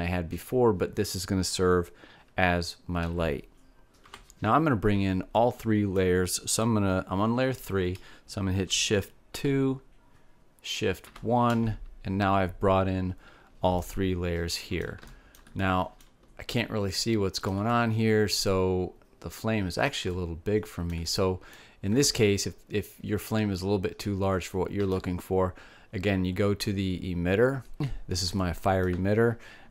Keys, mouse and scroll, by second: 4.0 alt+a, 6.6-10.5 middle drag, 11.1 shift+2, 12.2 shift+1, 14.9 middle click, 20.7 middle click, 23.4-25.1 middle drag, 28.4-29.7 drag.